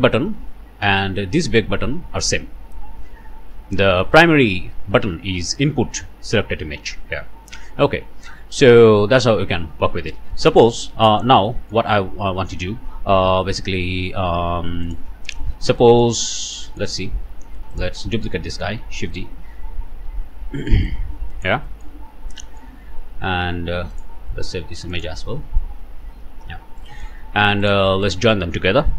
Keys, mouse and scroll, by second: 0.4-1.1 scroll up 2, 1.1-2.1 drag, 2.5-3.3 scroll down 2, 7.6-8.3 scroll up 1, 9.5 scroll down 1, 10.3 middle click, 10.7 scroll up 1, 11.2 alt+a, 11.2 typing, 11.5 alt+middle click, 11.7 alt+scroll up 1, 14.9 click, 15.8 click, 16.3 scroll down 1, 16.7 middle click, 17.7 shift+middle click, 18.1 shift+middle click, 19.0 shift+d, 20.1 Escape, 20.9 middle click, 20.9 click, 21.0 middle click, 21.5 shift+click, 21.8 shift+middle click, 21.9 shift+click, 22.0 shift+scroll up 1, 22.4 shift+click, 22.5 middle click, 22.9 scroll up 1, 23.3 alt+a, 23.9 click, 24.9 click, 25.6 Return, 26.6 middle click, 26.9 click, 27.2 alt+a, 27.6 alt+shift+click, 28.1 alt+shift+click.